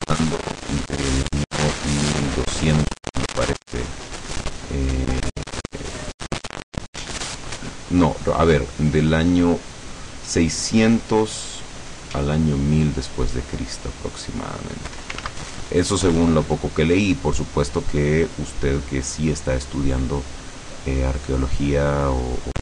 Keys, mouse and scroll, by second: 0.1 click, 0.9 click, 1.9 click, 3.4 ctrl+z, 4.7 click, 14.1 click, 15.3 ctrl+z, 15.9 click, 16.6 click, 17.3 click, 18.0 click, 18.9 click, 19.7 click, 20.4 click, 21.5 click, 22.3 click.